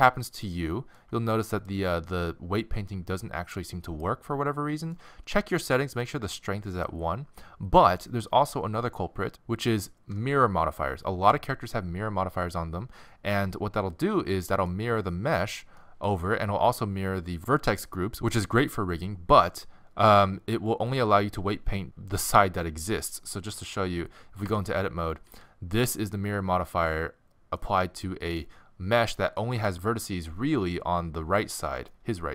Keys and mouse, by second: 2.3-4.3 middle drag, 6.0-7.5 middle drag, 7.5 drag, 9.3-18.3 middle drag, 20.9-24.4 drag, 24.4 Tab, 25.3 a, 25.9 middle click, 31.9 middle click.